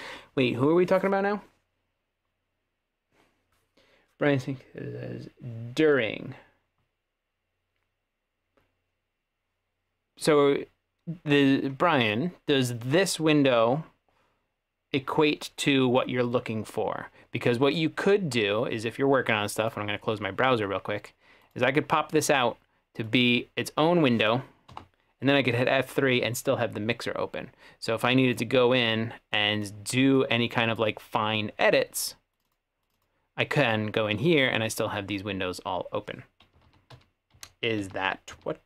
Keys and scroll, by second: 24.8 F3, 36.7 super+z, 37.0 super+z, 37.4 super+z.